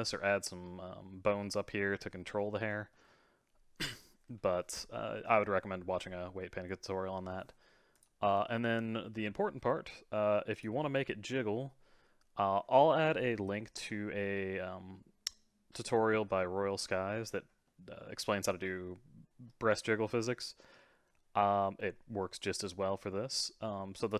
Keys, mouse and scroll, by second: 2.9-7.9 middle drag, 7.9 click, 8.4-10.5 middle drag, 10.5 click, 10.6-13.6 middle drag, 17.7-21.9 middle drag, 21.9-23.8 scroll down 4, 23.8 scroll down 1, 24.0-24.1 drag.